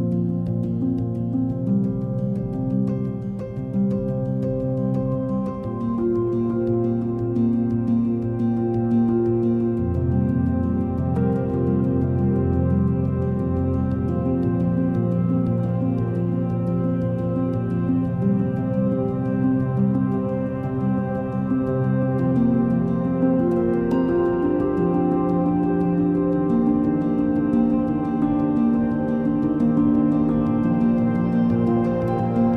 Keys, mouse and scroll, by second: 1.7 r, 3.8 s, 6.4-8.2 middle drag, 8.2 shift+d, 10.2-11.5 middle drag, 11.5 r, 13.7-15.1 middle drag, 15.1 shift+d, 17.4-18.5 middle drag, 18.5 r, 21.5-22.7 drag, 22.7 KP_0, 24.7 click, 26.0-27.2 drag, 27.2 KP_0, 29.1 KP_0.